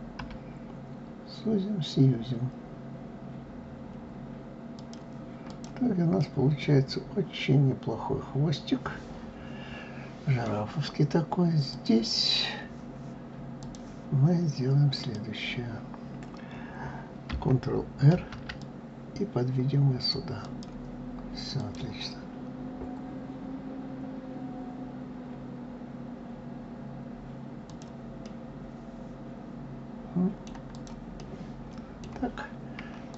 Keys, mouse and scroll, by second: 5.1 click, 5.8-8.8 middle drag, 11.3 click, 13.2 click, 14.6 click, 17.7 ctrl+r, 21.2 click, 27.3 click, 27.8-30.3 middle drag, 30.3 click, 30.8-32.7 middle drag, 32.7 click.